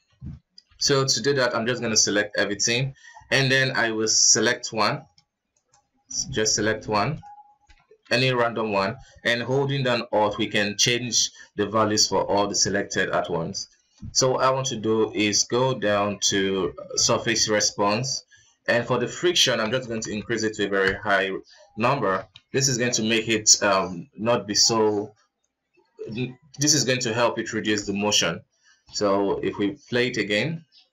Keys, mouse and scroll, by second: 0.1 shift+z, 0.9 b, 3.1-4.3 scroll up 7, 4.7-5.9 alt+right drag, 6.9 shift+right click, 7.5-8.3 middle drag, 8.3 ctrl+s, 8.6 scroll down 2, 11.7-12.6 scroll down 4, 13.5-14.9 scroll down 2, 17.3-17.8 drag, 17.8-18.8 scroll down 5, 18.8-20.2 alt+drag, 20.2 alt+KP_0, 22.5 alt+a, 22.9 ctrl+s, 23.1 middle click, 23.5 shift+z, 27.9 shift+space, 29.2-30.5 middle drag, 30.5 ctrl+s.